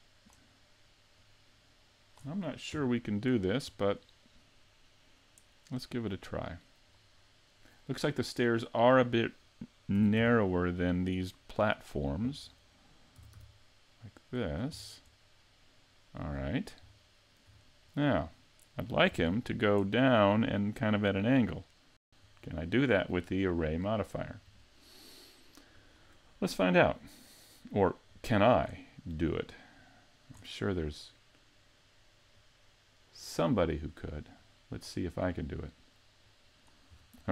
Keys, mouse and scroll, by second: 1.2 click, 2.1 scroll up 3, 2.7 KP_Decimal, 3.4-4.1 scroll down 5, 4.1 middle click, 6.2 click, 10.0 s, 11.2 click, 11.7 middle click, 13.2 s, 14.8-15.5 scroll down 3, 15.2 middle click, 16.4 scroll down 3, 17.1 shift+middle click, 17.9-18.2 scroll up 3, 18.3 middle click, 19.2 s, 21.6 shift+middle click, 23.7 click, 28.1 click, 29.8 click, 32.3 click, 34.4 click, 36.2 click.